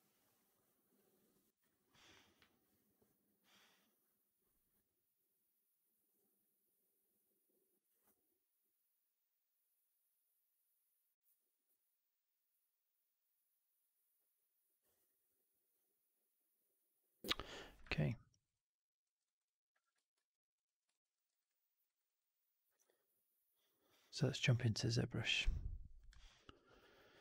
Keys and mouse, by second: 18.0 alt+right drag, 18.3 alt+click, 18.9 alt+middle drag, 19.1 alt+right drag, 19.3-19.7 alt+drag, 20.0 ctrl+s, 20.8 alt+drag, 21.0 alt+middle drag, 21.2 alt+right drag, 21.4-21.7 alt+drag, 21.7 right drag, 22.0-22.6 drag.